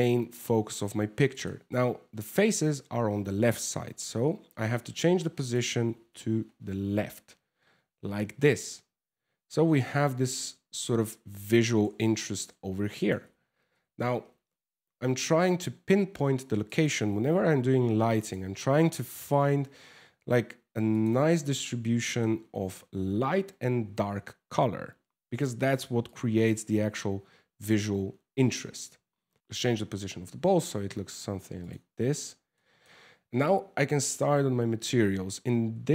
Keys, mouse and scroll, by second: 3.4 g, 5.4 r, 11.5 g, 12.8 f, 13.3 g, 16.7 g, 18.6 r, 20.9 shift+middle click, 21.2 scroll up 5, 21.6 shift+middle click, 22.0 scroll down 3, 25.6 click, 29.3 ctrl+s, 29.9 scroll up 1, 30.3 scroll down 1, 31.2 right click, 32.1 shift+middle click.